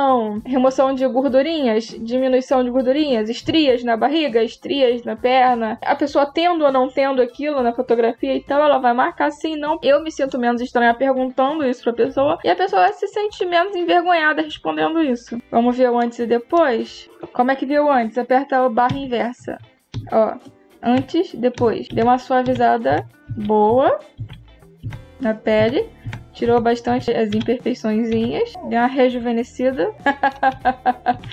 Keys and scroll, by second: 18.7 \, 30.3 \.